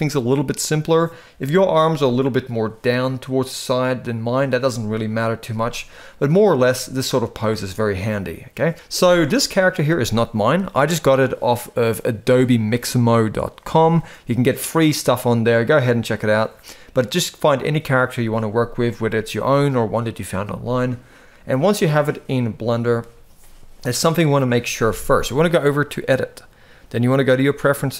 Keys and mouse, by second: 1.2 KP_1, 6.5 shift+middle click, 21.7 shift+middle click, 25.7-27.3 drag.